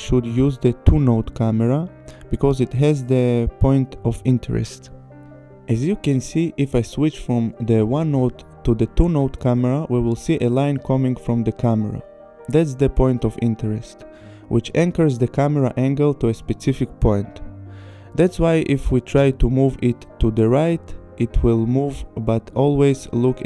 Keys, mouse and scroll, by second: 2.2 click, 6.0 click, 8.6 click, 10.7 click, 13.0 click, 16.8 p, 20.4 click, 21.0 click.